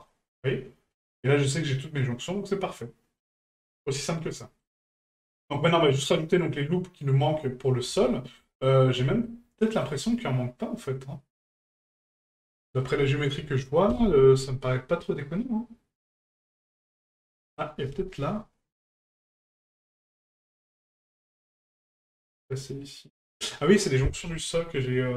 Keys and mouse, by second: 0.1-0.4 middle drag, 0.9-1.2 middle drag, 2.0-3.2 middle drag, 4.1-4.6 middle drag, 5.0-5.5 middle drag, 7.1-7.6 middle drag, 8.0-8.4 shift+middle drag, 9.2-9.8 shift+middle drag, 12.3-12.8 shift+middle drag, 17.7-22.2 middle drag.